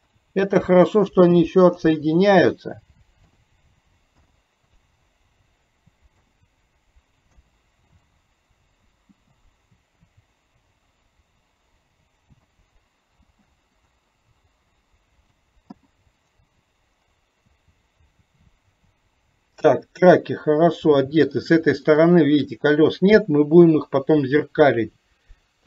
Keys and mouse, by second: 17.5-21.4 middle drag, 22.2 middle click, 23.7 KP_3.